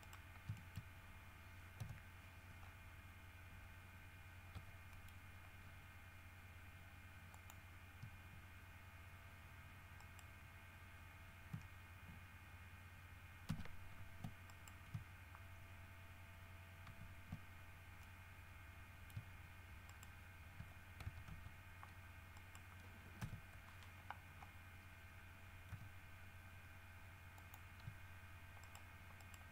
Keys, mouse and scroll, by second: 0.3 middle click, 0.7 shift+middle click, 1.3 shift+scroll up 3, 2.0 KP_3, 2.8 scroll down 2, 4.7 e, 5.1 middle click, 7.5 click, 10.2 right click, 13.7 ctrl+c, 14.7 ctrl+middle click, 17.0 ctrl+v, 18.2-19.5 middle drag, 20.1 shift+right click, 21.2 shift+w, 21.5 s, 22.6 right click, 23.4 KP_1, 24.5-24.8 scroll up 1, 25.9 g, 27.6 click, 28.8 shift+right click, 29.4 shift+right click.